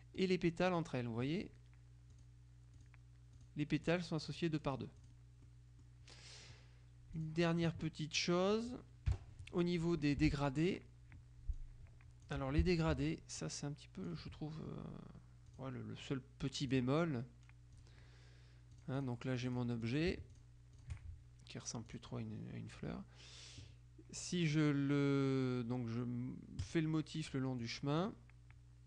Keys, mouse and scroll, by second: 0.3 click, 2.2 click, 5.6 click, 5.6 right click, 7.2 click, 8.3 click, 9.2 Delete, 10.1 F2, 10.7 click, 11.6-12.8 drag, 12.5 Delete, 13.5-14.6 drag, 15.6 click, 17.8 click, 18.9-21.5 drag, 22.0 click, 26.8 click, 27.8 click.